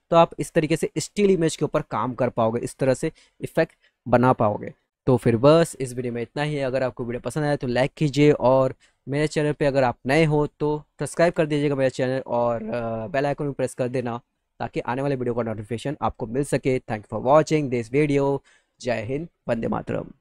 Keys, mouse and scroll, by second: 0.2 middle click, 0.4 middle click.